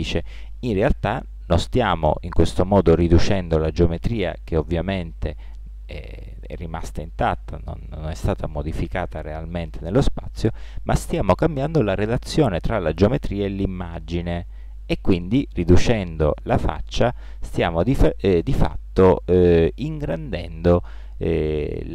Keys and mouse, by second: 9.4-13.7 middle drag.